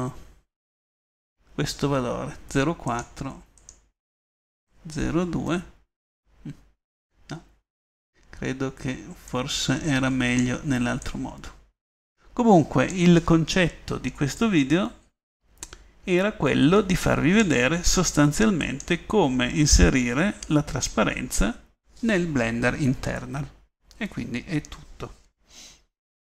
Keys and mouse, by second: 4.0-5.6 middle drag, 11.4-14.3 middle drag, 17.5-18.5 middle drag, 19.1-22.3 drag, 24.9 click.